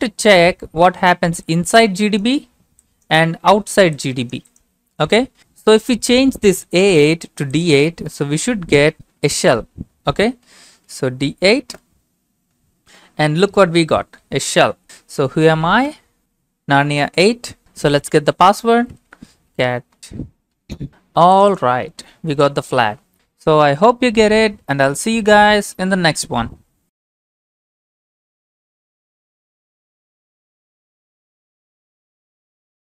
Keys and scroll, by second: 8.4 Home, 8.8 Left, 8.9 Left, 10.4-10.9 typing, 11.7 Return, 14.1-15.8 typing, 18.8-20.0 typing, 20.9 Return, 22.5 ctrl+c.